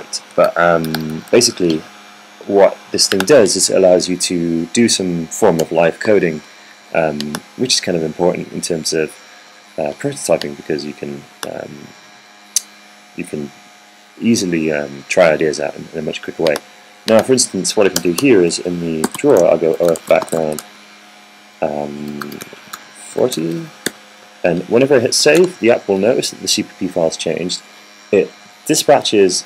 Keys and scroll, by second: 0.1 Down, 1.3 Down, 1.7 Down, 2.0 Down, 2.2 Down, 6.5 BackSpace, 18.9-21.9 typing, 19.0 Return, 23.1-25.3 typing, 26.2 super+s.